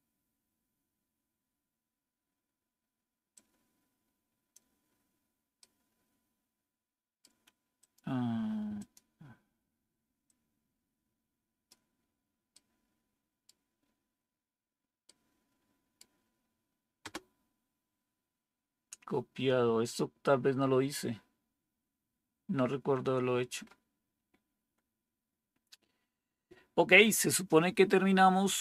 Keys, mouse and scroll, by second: 16.9 Return.